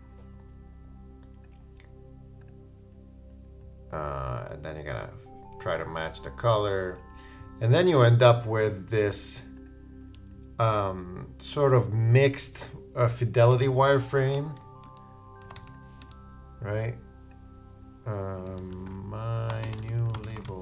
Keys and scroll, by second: 18.7 shift+Return, 18.9-20.6 typing.